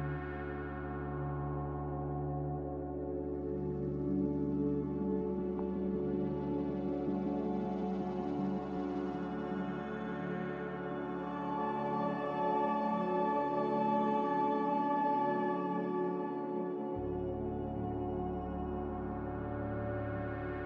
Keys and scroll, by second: 2.5-3.4 typing, 6.6 typing, 6.8 Return, 10.8 z, 12.1-13.2 typing.